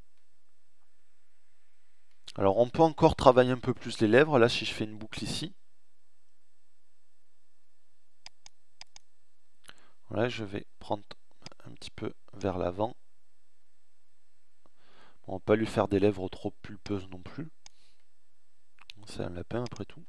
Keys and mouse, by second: 3.2 ctrl+r, 11.8 middle click, 13.5 middle click, 14.0 middle click, 17.0 middle click.